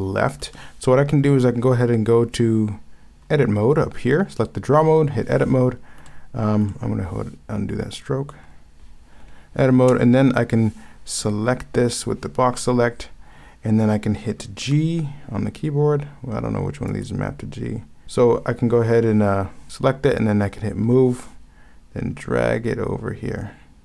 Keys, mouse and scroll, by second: 0.5 ctrl+z, 6.1 ctrl+z, 6.6 ctrl+z, 14.7 b.